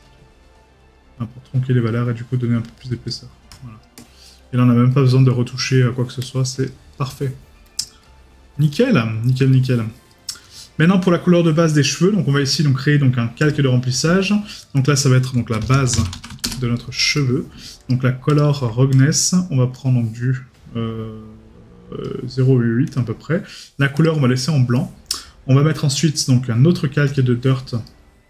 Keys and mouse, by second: 4.9 right click, 5.5 middle click, 6.9 right click, 9.5 right click, 10.6 middle click, 17.2 right click, 27.9 right click.